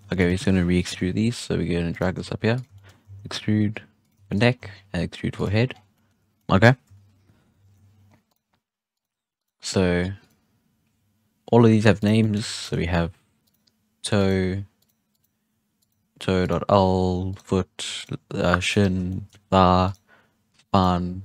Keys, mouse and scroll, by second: 0.0 x, 0.8 KP_3, 1.8 right click, 2.0 g, 2.7 shift+middle drag, 3.0 e, 4.2-4.5 shift+middle drag, 4.5 e, 5.6 scroll down 1, 5.9 middle click, 6.8 KP_1, 7.3-7.8 scroll down 3, 7.5 shift+middle click, 7.8-8.2 scroll up 3, 8.2 right click, 8.9 right click, 9.3 right click, 10.1-10.7 drag, 11.9 right click, 12.1-13.4 middle drag, 13.4 right click, 14.1 right click, 14.7 right click, 15.0 right click, 15.7 right click, 16.3 right click, 17.2 right click, 17.9 right click, 18.6 right click, 19.0-19.8 shift+middle drag, 19.8 right click, 20.6 right click.